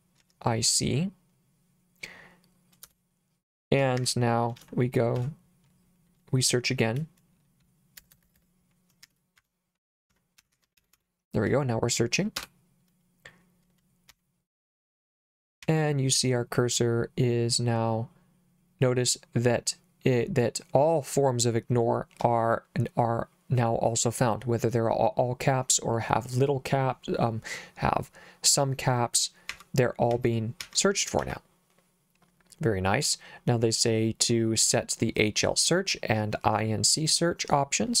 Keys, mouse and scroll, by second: 0.0-0.2 typing, 2.9 Return, 4.0 Escape, 4.6 shift+;, 5.2 /, 8.0 BackSpace, 8.1 BackSpace, 8.2 BackSpace, 8.4 BackSpace, 9.1 Escape, 9.4-11.5 typing, 12.4 Return, 14.1 n, 15.6 n, 29.5 n, 30.1 n, 30.6 n, 31.2 n.